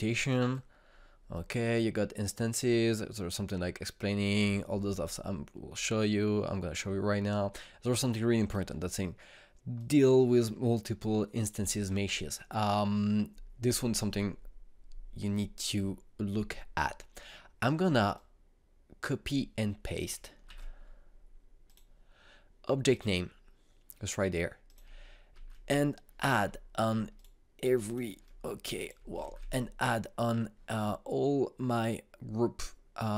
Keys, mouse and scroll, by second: 1.1-14.6 drag, 18.7-21.1 drag, 21.1 ctrl+c, 22.2 click, 25.2 click, 25.9 ctrl+v, 27.7 ctrl+click, 29.8 ctrl+v.